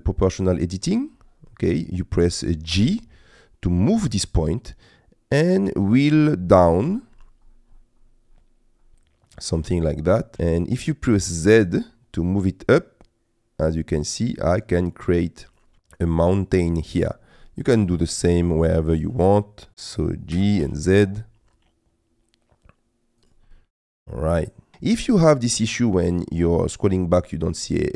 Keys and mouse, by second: 0.8 click, 1.6 middle click, 2.8 g, 10.4 z, 15.7-16.8 middle drag, 17.5 middle click, 18.7 middle click, 19.2 click, 19.7 Escape, 20.4 g, 20.7 z, 23.2 click, 23.5-24.7 middle drag, 25.9 middle click.